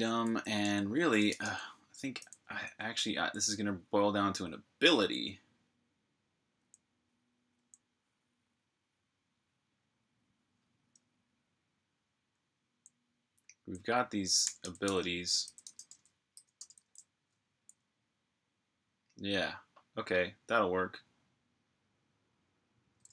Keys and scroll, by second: 0.0-2.8 typing, 6.4 j, 12.1-12.4 typing, 13.5-16.7 typing.